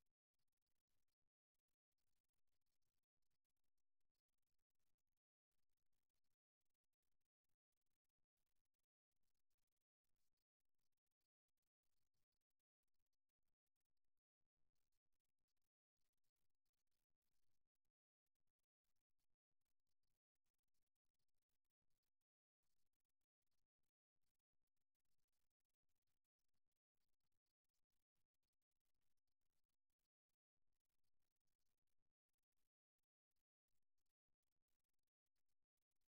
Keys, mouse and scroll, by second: 6.3 shift+a, 6.9-8.9 middle drag, 17.6 Tab, 18.1 x, 19.9 middle click, 23.3 middle click, 34.1-36.0 drag.